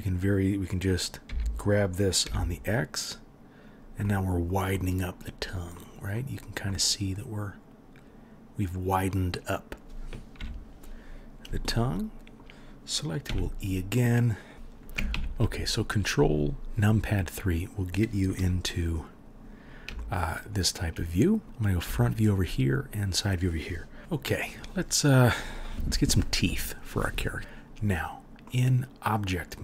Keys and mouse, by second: 1.2 g, 10.3 KP_3, 13.2 e, 14.5 KP_1, 15.1 ctrl+KP_3, 18.4 3, 29.3-29.6 middle drag, 29.3-29.6 right drag.